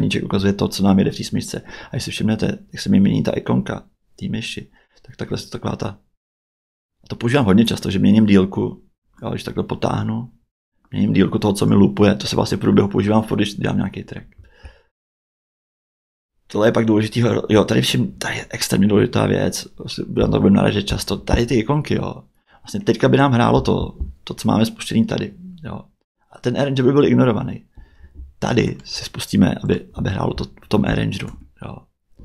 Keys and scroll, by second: 22.8 Tab, 26.0 Tab, 31.3 space.